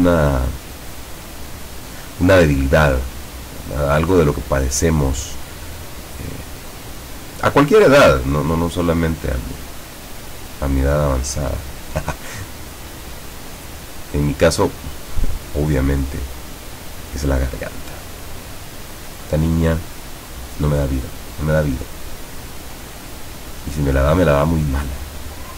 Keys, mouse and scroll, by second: 1.3-2.9 drag, 3.7 click, 5.0 click, 6.0 click, 9.3-11.3 drag, 12.9-14.5 drag, 16.7 click, 17.5-19.0 drag, 20.9-23.3 drag.